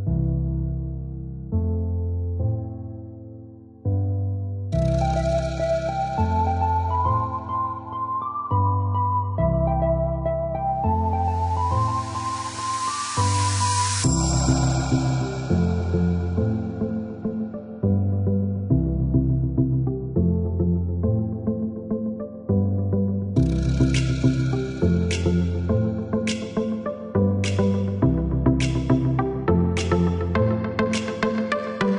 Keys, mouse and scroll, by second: 2.5 click, 6.9 click, 9.3 click, 10.7 click, 11.6 click, 13.1 Escape, 14.3 click, 19.9 click, 21.7 KP_5, 22.3 KP_Enter, 24.3 click, 26.5 click, 27.2 click, 27.9 KP_1, 28.3 KP_5, 28.7 KP_Enter, 30.5 click.